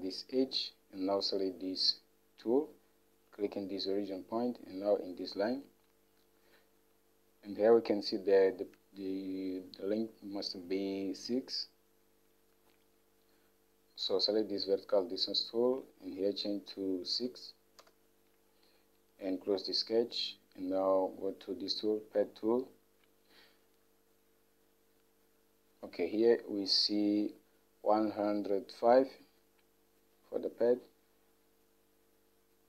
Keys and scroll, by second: 17.4 6, 18.0 Return, 26.3 Home.